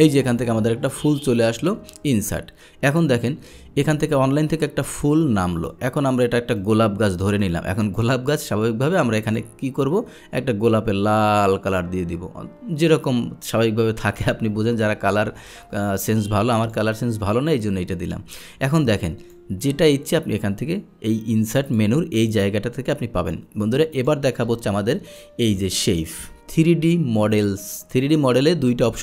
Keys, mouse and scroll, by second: 0.4 click, 1.6 click, 5.1 click, 6.6 click, 8.0 click, 9.4 click, 16.7 click, 18.7 click, 21.7 click, 24.0 click, 24.8 Delete, 25.1 click, 25.6 Delete, 27.4 click.